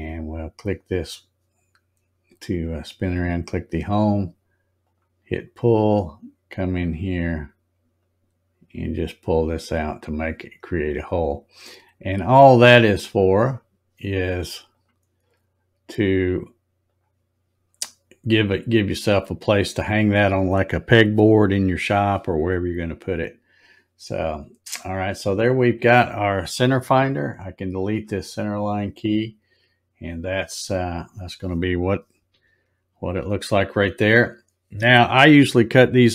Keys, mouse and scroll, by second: 0.1 click, 4.7 click, 7.9-9.3 drag, 13.0 click, 14.6 click, 15.8 click, 16.8 click, 17.8 scroll, 17.9 scroll, 18.0 scroll, 18.5 scroll down 4, 19.7 click, 22.5 middle click, 23.2 scroll up 2, 25.2 click, 28.9 scroll up 1, 29.5 scroll up 3, 30.7 scroll down 1, 32.2 z.